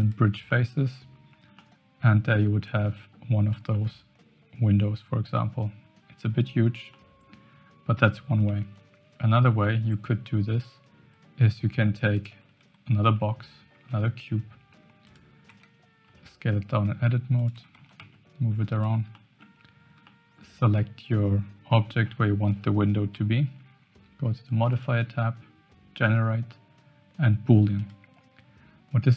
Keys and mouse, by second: 0.5 middle click, 1.6-3.3 middle drag, 3.7-5.3 middle drag, 6.9 middle click, 8.3 Tab, 9.4 shift+a, 13.7 g, 15.4 Tab, 16.0 s, 17.5 Tab, 17.7 g, 19.1-19.4 shift+middle drag, 20.0-20.4 shift+middle drag, 24.8-27.9 drag.